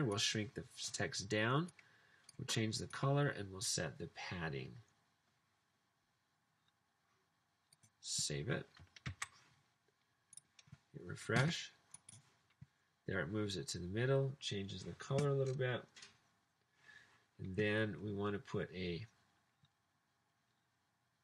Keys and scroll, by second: 9.1 super+s.